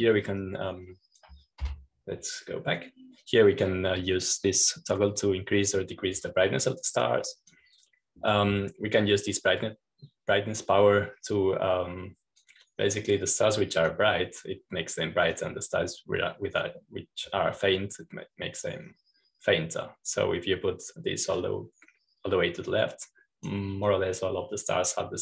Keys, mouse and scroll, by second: 3.6 Home, 5.1-9.5 drag, 10.2-16.4 drag, 17.2-25.2 drag.